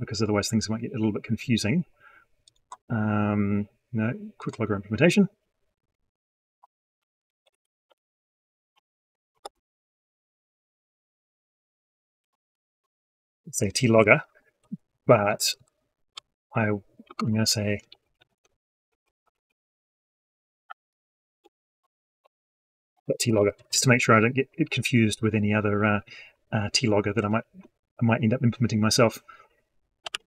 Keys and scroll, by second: 29.9 ctrl+shift+c.